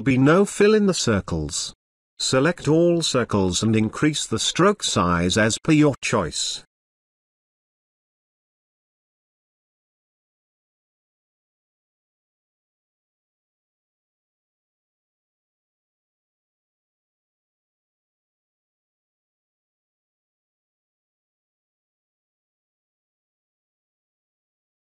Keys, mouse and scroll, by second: 3.2 space, 3.4-4.0 ctrl+drag, 13.4 click, 13.6-14.2 alt+shift+drag, 18.1 space, 18.2-24.8 ctrl+drag.